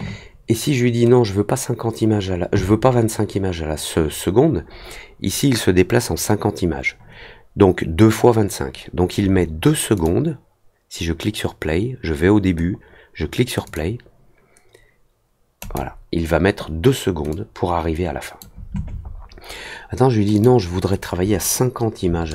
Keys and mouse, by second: 9.9 click, 13.6 click, 15.5 click, 17.2-18.3 drag, 20.3 click.